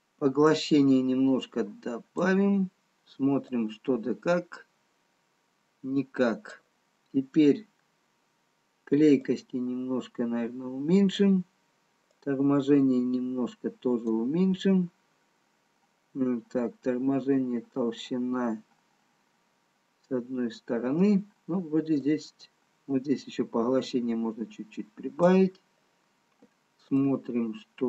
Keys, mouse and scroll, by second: 1.3 click, 4.4 click, 10.2 click, 14.9-15.9 scroll down 2, 19.3-21.3 scroll down 3, 21.3-22.0 scroll up 4, 23.6 click, 27.3 click.